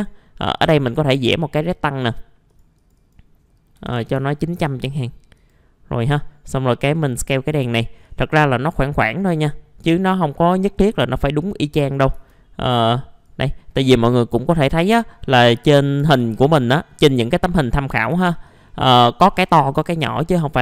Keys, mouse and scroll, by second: 3.7 KP_9, 3.9 KP_0, 5.3 right click, 6.0 click, 7.6 typing, 8.0-12.1 drag, 12.7 click, 13.9 middle click, 16.0 r, 16.6 click, 18.1 w, 18.4-19.6 drag.